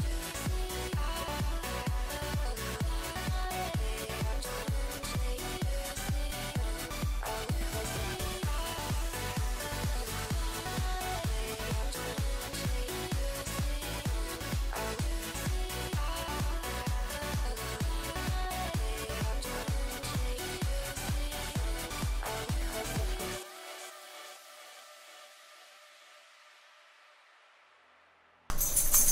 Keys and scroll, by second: 1.7 F7, 2.8 s, 3.3 s, 8.8 s, 10.4 s, 10.8 s, 13.8 s, 22.4 s.